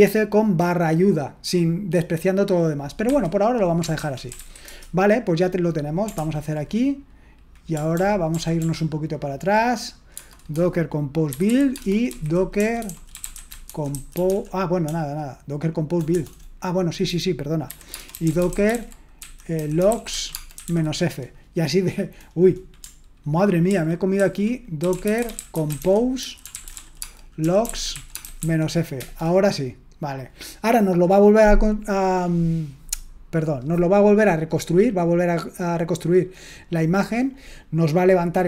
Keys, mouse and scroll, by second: 3.0 Escape, 3.7-5.1 typing, 6.1 ctrl+l, 7.9 ctrl+p, 8.3 ctrl+p, 8.6 ctrl+p, 10.1 space, 11.3-21.0 typing, 23.7 ctrl+w, 24.1 ctrl+w, 24.6-28.9 typing, 28.9 Return.